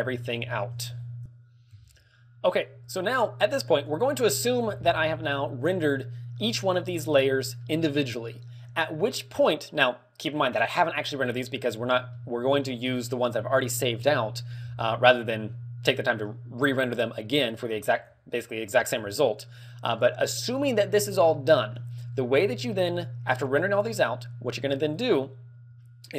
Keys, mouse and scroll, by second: 0.1 shift+middle click, 1.5 scroll down 11, 1.5 shift+space, 3.6 click, 5.1 middle click, 5.7-6.6 scroll up 3, 7.5 middle click, 8.2 middle click, 8.9 middle click, 12.0 alt+middle click, 13.7 scroll down 10, 13.7 shift+space, 19.5 middle click, 21.2 middle click, 21.9-22.6 scroll down 2, 22.6 middle click, 24.8-26.0 click.